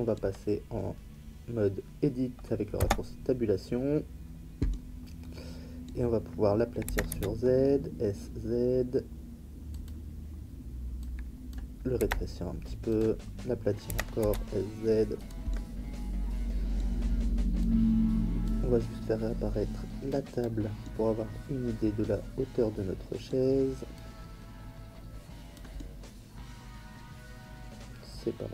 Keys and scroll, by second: 2.8 Tab, 6.8 s, 7.1 z, 12.0 s, 14.2 z.